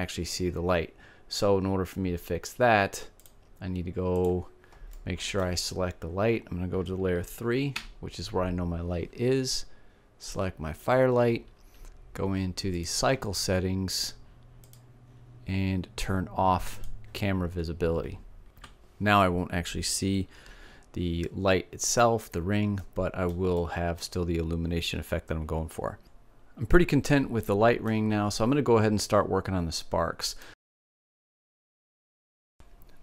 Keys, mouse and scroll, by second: 4.6-6.4 middle drag, 7.3 3, 9.8-11.6 drag, 11.6 middle click, 12.3-16.0 drag, 16.0 middle click, 16.3-17.5 drag, 20.8-24.9 middle drag, 26.8 middle click, 29.7 click, 32.5-33.0 drag.